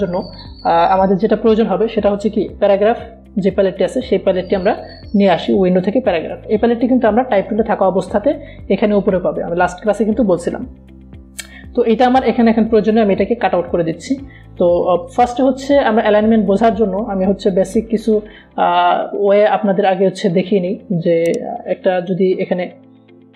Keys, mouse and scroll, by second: 5.1 click, 13.0-14.7 drag, 21.2 right click, 22.8 click.